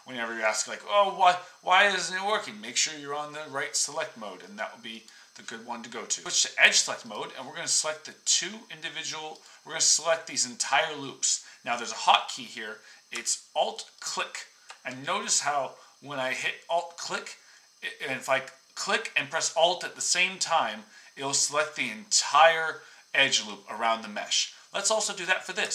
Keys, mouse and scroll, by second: 7.1-8.4 drag, 9.4-13.9 drag, 14.0-15.4 alt+drag.